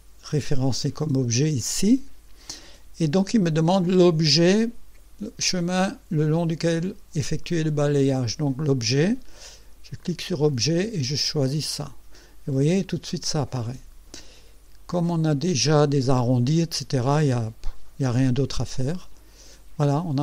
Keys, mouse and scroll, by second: 10.0 click, 11.5 click, 12.6-14.3 drag, 14.5 scroll up 1, 15.0 right click, 19.0 click, 19.9-20.2 drag.